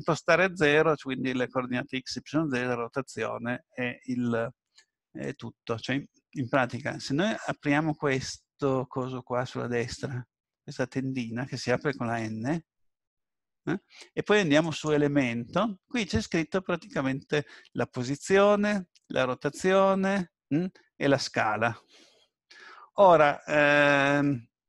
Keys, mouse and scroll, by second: 14.6 click.